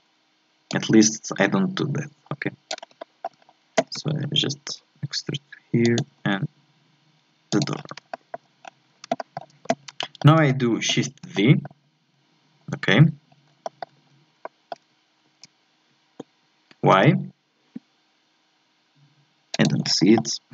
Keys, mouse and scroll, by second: 0.7-3.0 drag, 3.0-4.0 shift+scroll up 2, 3.0 shift+middle click, 4.0 e, 6.1 e, 7.7 scroll down 4, 8.1 shift+middle click, 8.6 scroll up 1, 9.2 shift+middle click, 9.8 scroll up 1, 10.0-12.8 shift+middle drag, 12.8-13.3 scroll down 2, 13.3 scroll up 2, 13.6 shift+middle click, 14.1-14.4 scroll up 1, 14.4 shift+middle click, 15.2 shift+d, 19.8 scroll down 2, 20.1 scroll up 1, 20.2-20.5 middle drag.